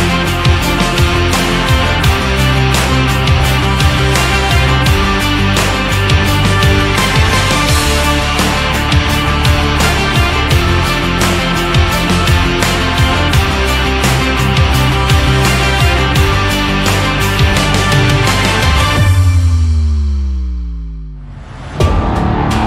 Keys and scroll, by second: 4.0 ctrl+z, 8.5 ctrl+z, 9.5 BackSpace.